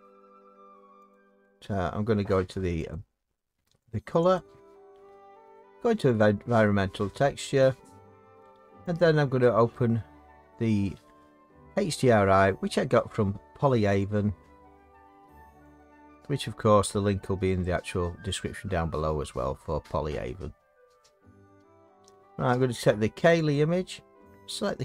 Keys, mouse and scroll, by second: 1.1 click, 2.9 click, 3.9 click, 4.4 click, 6.2 click, 9.0 click, 13.9 click, 14.1 click, 14.9 middle click, 15.3-15.8 scroll down 6, 15.8 click, 16.2-17.7 scroll down 4, 17.7-18.4 scroll down 3, 23.4-24.3 drag, 24.6-24.8 drag.